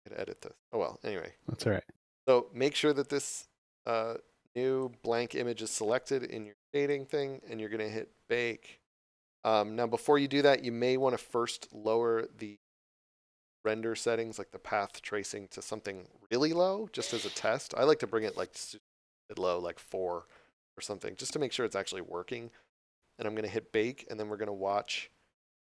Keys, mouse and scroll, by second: 3.1 click, 10.4 scroll up 1, 13.5 click.